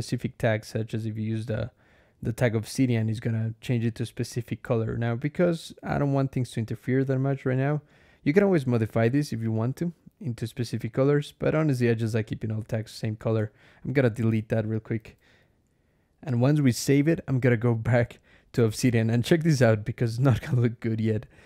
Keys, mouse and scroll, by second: 0.1 click, 1.3 click, 3.0 click, 5.2-6.7 drag, 8.0 scroll down 2, 8.9 click, 10.1 click, 11.4-12.5 drag, 13.2 BackSpace, 14.8 ctrl+s, 15.5 ctrl+alt+\, 21.3 4.